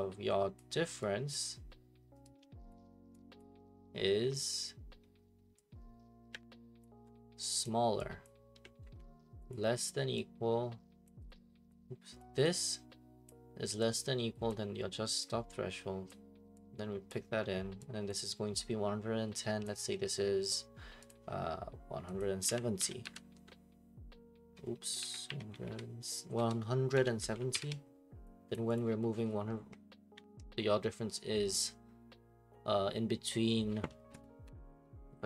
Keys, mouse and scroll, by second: 0.6 click, 1.3 click, 2.7 click, 3.4 click, 6.3 click, 6.8 ctrl+click, 7.6 ctrl+click, 8.2 click, 8.8 <, 9.1 Left, 9.5 click, 11.0 click, 11.3 click, 12.2 click, 13.3 click, 14.5 click, 16.1 click, 17.1 click, 18.1 click, 19.6 click, 21.1 click, 22.2 click, 22.2-23.9 typing, 25.0 ctrl+a, 25.0-27.4 typing, 27.5 alt+p, 28.5 click, 28.7 click, 34.4 Escape.